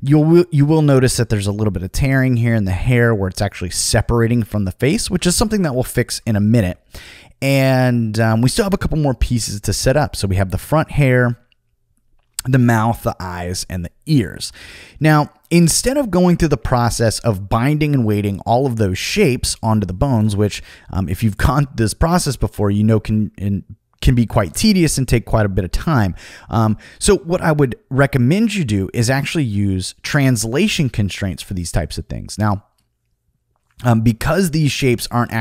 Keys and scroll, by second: 4.2 super+z, 5.1 super+z, 5.7 super+z, 24.5 super+z.